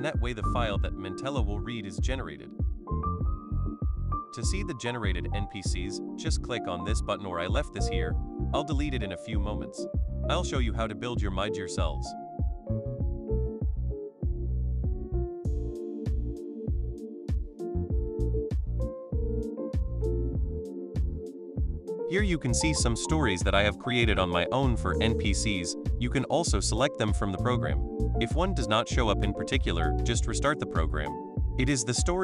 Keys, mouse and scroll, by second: 2.5 click, 6.0 click, 8.4 right click, 9.7 click, 12.0 right click, 13.0 click, 19.0 click, 23.5 click, 24.9-28.2 drag, 30.4 click, 31.8 click.